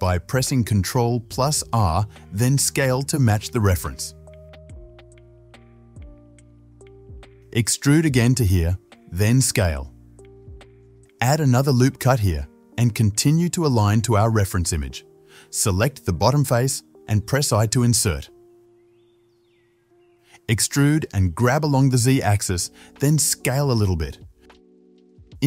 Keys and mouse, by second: 1.9-4.7 drag, 2.6 shift+s, 4.7 shift+middle click, 5.0 click, 5.0 alt+shift+middle click, 5.2 alt+shift+click, 5.3-6.6 alt+shift+middle drag, 6.6-9.2 drag, 8.0 e, 9.2-12.0 shift+middle drag, 9.4 ctrl+z, 9.9 s, 12.0 ctrl+r, 12.8 s, 15.0 shift+z, 15.8 middle click, 16.2 3, 16.4 click, 16.5-25.4 middle drag, 16.7 ctrl+z, 16.7 s, 18.1 i, 21.8 e, 23.6 s.